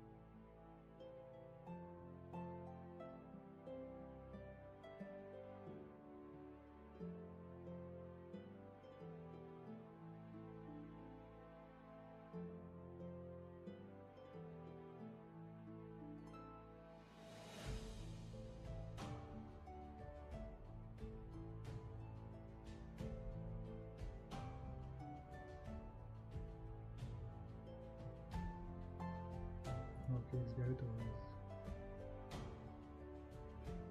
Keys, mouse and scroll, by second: 5.2 ctrl+z, 7.9 ctrl+z, 29.8 ctrl+z, 33.3 ctrl+z.